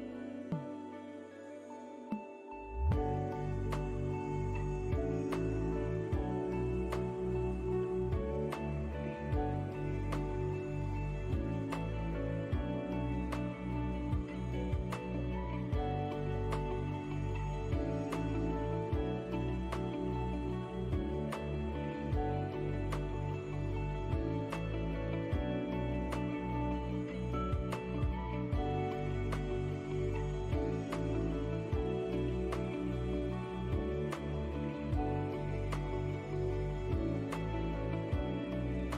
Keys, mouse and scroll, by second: 0.4 click, 0.8 scroll down 1, 1.2 middle click, 2.7 scroll down 1, 2.9 middle click, 3.8 click, 6.1 middle click, 7.8 shift+click, 9.9 ctrl+l, 19.7 middle click, 20.3 click, 20.6-21.0 scroll up 1, 21.0 middle click, 26.3-27.7 scroll up 9, 27.8 scroll down 2, 28.7-29.0 scroll down 1, 29.4-30.1 scroll down 6, 30.1 middle click, 32.1 scroll down 1, 32.4 middle click, 33.4 click, 35.7 shift+click, 37.5 ctrl+l.